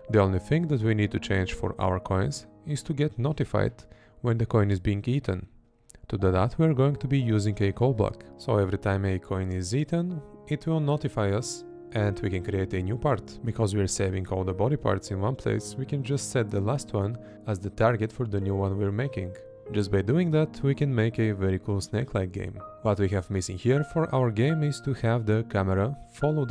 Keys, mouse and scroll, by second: 0.7 Right, 5.3 Right, 7.2 Right, 8.3 Left, 9.6 Right, 10.9 Left, 12.8 Left, 13.2 Right, 13.7 Right, 17.5 Right, 21.2 Left, 22.8 Left, 23.6 Right.